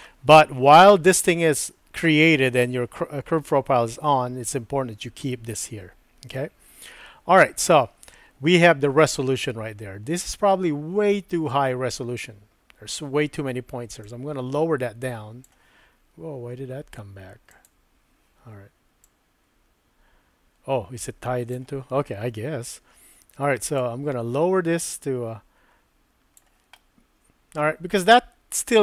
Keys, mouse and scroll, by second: 14.0-15.4 drag, 17.5 click, 19.0-21.5 drag, 23.8-26.4 drag, 26.7-28.8 middle drag.